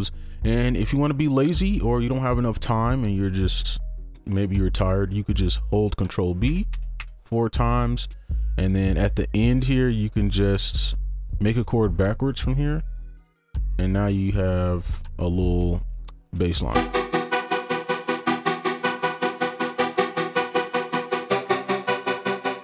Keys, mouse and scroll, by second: 2.8 ctrl+2, 3.0 ctrl+click, 6.5 ctrl+b, 6.7 ctrl+b, 7.0 ctrl+b, 8.7-9.6 scroll down 1, 9.6 right click, 9.9 ctrl+click, 11.8 shift+click, 13.2 right click, 14.2 ctrl+z, 14.5 right click, 16.7 space.